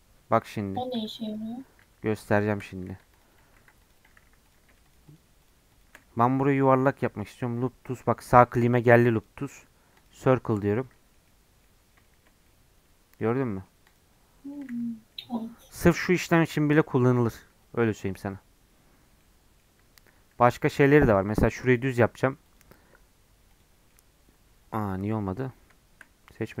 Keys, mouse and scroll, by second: 0.7 click, 1.0 scroll up 3, 1.3 click, 1.8 Tab, 2.0-2.4 scroll up 1, 2.4 shift+middle click, 2.9 ctrl+r, 3.6 ctrl+r, 4.2 3, 4.5-6.6 drag, 6.6-10.3 right drag, 10.3-11.8 middle drag, 11.8 scroll up 4, 12.1-13.9 shift+middle drag, 13.9 click, 14.5 middle click, 14.8 Tab, 15.1 middle click, 16.1 Tab, 16.5-19.8 middle drag, 19.8 Tab, 20.2 Tab, 20.5 2, 21.1 click, 21.8-23.9 right drag, 23.9-26.6 middle drag.